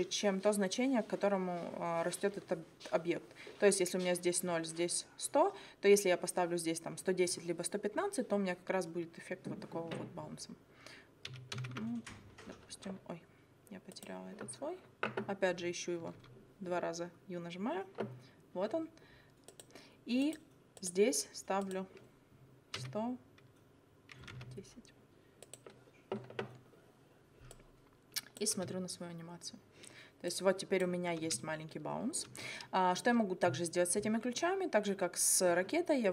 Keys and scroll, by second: 11.3 1, 11.7 0, 16.0 u, 22.8 1, 23.9-24.8 typing, 28.6 space, 31.2 space.